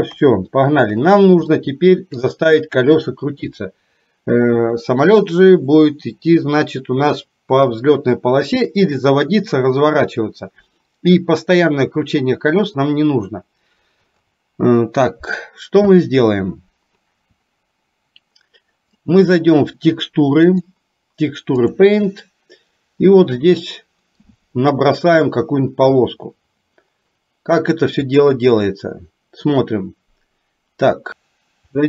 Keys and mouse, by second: 0.2 KP_3, 1.7 shift+middle click, 20.7-22.0 drag, 28.2 click, 31.1 click.